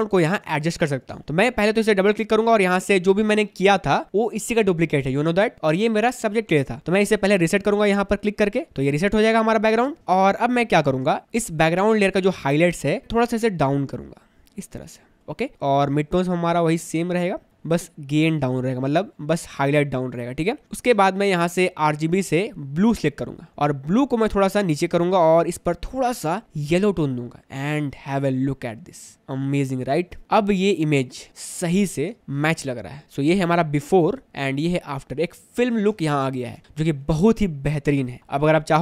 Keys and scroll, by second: 0.1 space, 10.0 space, 20.6 space, 29.2 space, 30.5 space, 32.0 space, 36.0 space.